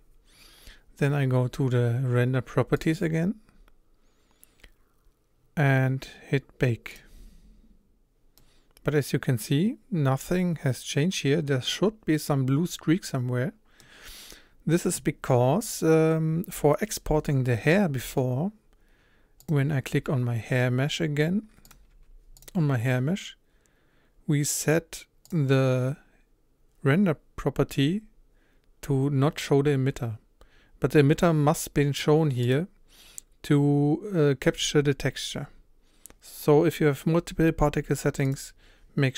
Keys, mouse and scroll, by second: 8.4-13.3 middle drag, 19.5 click, 21.7 click, 21.9 h, 22.4 click, 32.6 click, 38.5 click.